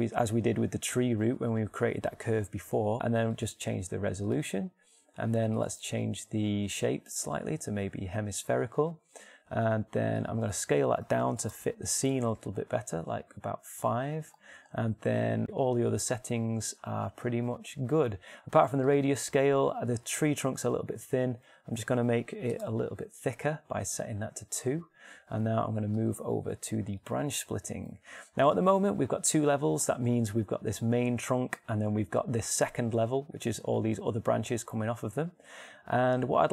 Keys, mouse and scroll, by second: 1.5-4.2 middle drag, 8.2-10.8 middle drag, 12.9-14.4 middle drag, 19.5-21.5 drag, 26.5-28.5 drag.